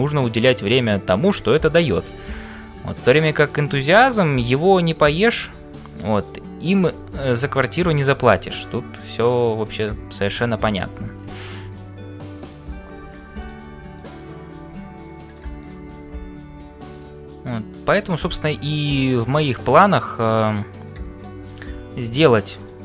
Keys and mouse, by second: 0.0-22.8 typing, 3.4 click, 5.2 shift+middle click, 6.2 click, 9.7 click, 11.3 shift+middle click, 12.4 click, 14.0 click, 15.6 click, 17.5 click, 19.0 click, 19.7 click, 20.2 click, 20.8 middle click, 21.4 click, 22.5 click.